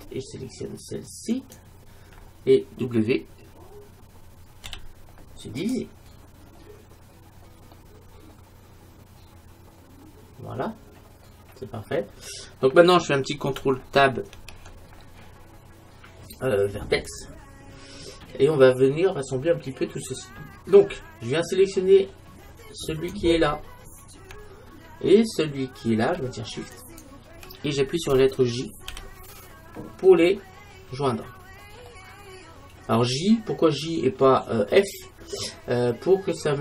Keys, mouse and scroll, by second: 1.4-3.2 right drag, 4.7 w, 6.5-9.7 middle drag, 14.3 ctrl+Tab, 17.8-19.9 middle drag, 22.9-24.8 right drag, 26.8-28.6 right drag, 29.0 j, 31.9-33.8 middle drag, 34.3-35.6 middle drag, 36.1 middle click.